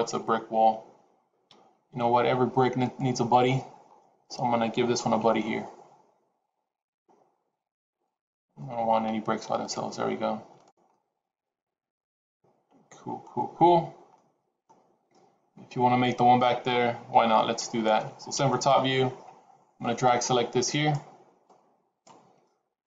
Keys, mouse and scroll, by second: 1.4 KP_3, 2.7 click, 3.8 scroll up 3, 5.1 shift+d, 8.3 scroll down 2, 8.4 middle click, 9.5 click, 10.4 click, 10.8 middle click, 14.0 middle click, 17.0 KP_3, 18.2 KP_7, 19.2-19.9 scroll down 3, 19.9 click, 21.3 click.